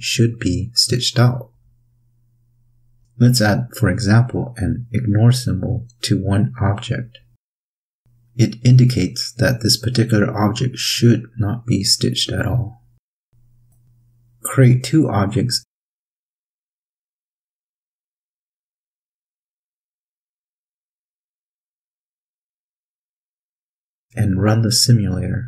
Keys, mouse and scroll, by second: 15.1-16.5 drag, 18.0 click, 19.6 click, 20.6 click, 22.9 click, 23.3 click, 24.1 click.